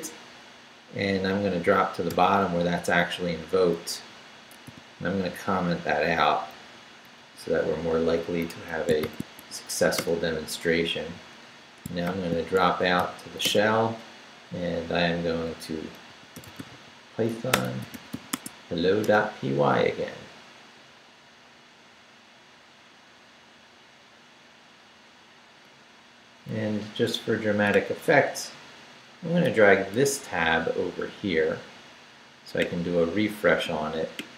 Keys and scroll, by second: 2.1 shift+g, 3.4 shift+Up, 3.7 Left, 4.6 i, 5.3 shift+3, 6.0 shift+Left, 6.5 Down, 7.2 shift+3, 8.5 Escape, 9.0 shift+;, 9.4 shift+w, 10.0 Return, 12.0 shift+;, 12.6 shift+s, 13.0 h, 13.4 Return, 15.8-18.6 typing, 19.0 Return.